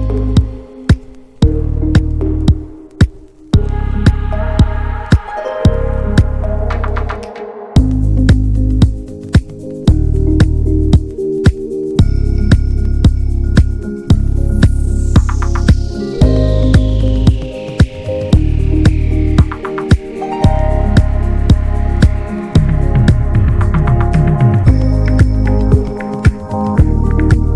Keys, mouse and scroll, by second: 1.0-2.2 drag, 2.2 Tab, 2.5 click, 2.6 scroll down 1, 2.8-6.1 middle drag, 6.1-9.8 drag, 9.8-10.4 middle drag, 10.4-11.0 scroll down 5, 11.0 scroll up 4, 11.6-12.7 scroll up 1, 12.7 click, 13.5 middle click, 13.9 click, 14.7 click, 19.1-20.1 scroll down 2, 20.1 middle click, 20.7-21.4 scroll up 2, 21.4-25.1 drag, 25.6 middle click, 26.2-26.8 scroll up 4, 26.8-27.5 drag.